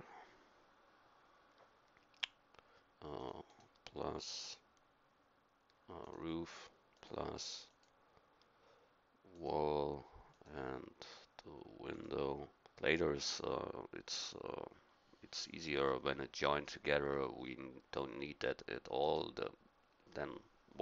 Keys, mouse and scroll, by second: 19.0-20.8 drag.